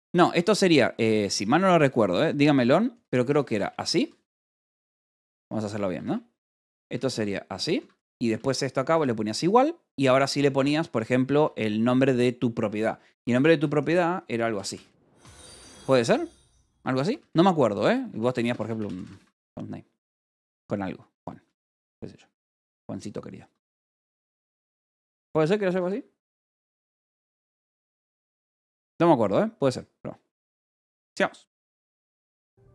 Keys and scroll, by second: 0.0 k, 1.0 l, 2.1-8.8 typing, 3.7 Escape, 5.2 Escape, 11.2 space, 12.6 Escape, 12.7-15.3 typing, 14.9 Escape, 17.0-20.5 typing, 21.9 ctrl+g, 22.2 Escape, 23.5-26.3 typing, 25.7 Escape, 28.3 k.